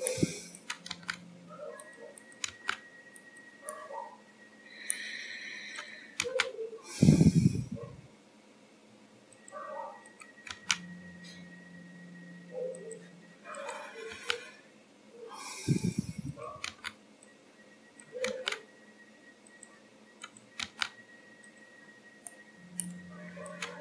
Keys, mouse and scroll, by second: 0.6 click, 1.0 g, 2.2 click, 2.6 g, 3.8 middle click, 5.8 click, 6.3 g, 10.1 click, 10.6 g, 13.6 click, 14.2 g, 16.4 click, 16.8 g, 18.1 click, 18.4 g, 20.3 click, 20.7 g, 21.9-22.3 scroll down 3, 22.3 middle click, 23.6 click.